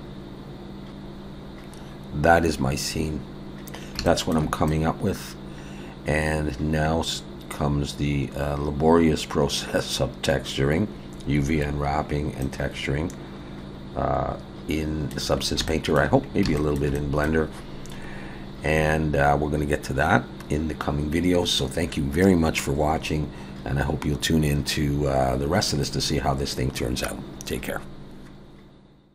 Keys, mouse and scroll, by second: 0.4 scroll down 1, 0.6 scroll down 1, 1.2 scroll up 2, 3.0-3.3 scroll down 2, 3.7 scroll down 2, 4.1 shift+middle click, 4.7 middle click, 12.0-12.4 scroll down 1, 12.4 middle click, 15.4-16.0 scroll up 2, 16.2 scroll down 1, 16.6 shift+middle click, 17.0 middle click, 25.5-25.8 scroll down 1, 25.8 middle click.